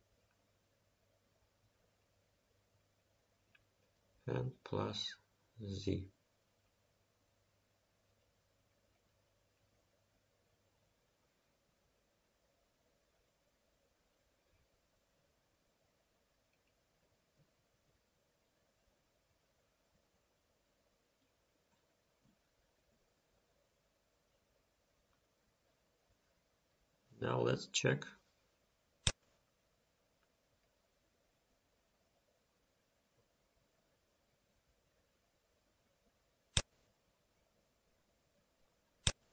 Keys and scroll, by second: 25.4 ctrl+s.